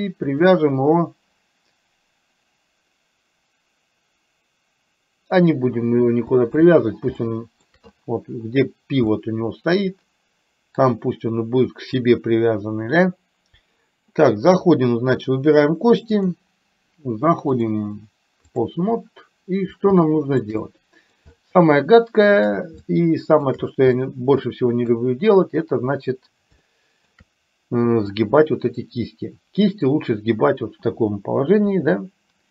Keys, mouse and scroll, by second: 0.3-5.6 drag, 6.7 click, 7.2 shift+middle click, 9.2-10.8 middle drag, 16.2 click, 17.6-18.7 drag, 20.1 shift+middle click, 20.7 middle click, 21.3-22.4 shift+middle drag, 22.9 shift+middle click, 24.1 middle click, 26.7 shift+middle click, 28.2 click, 31.8 r.